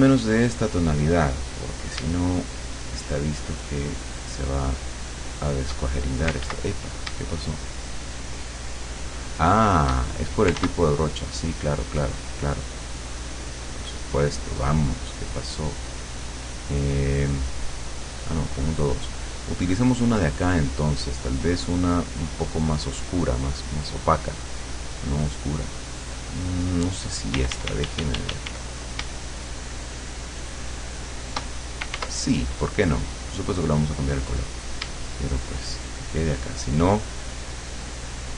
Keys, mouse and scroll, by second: 2.5-5.9 shift+drag, 6.5 ctrl+z, 7.5-10.1 shift+drag, 10.6 ctrl+z, 11.8 click, 14.1 click, 16.0 click, 17.9 click, 19.3-25.5 drag, 25.7 click, 27.4 d, 29.4-31.6 shift+drag, 32.0 ctrl+z, 33.0 click, 33.7 click, 35.4-38.3 shift+drag.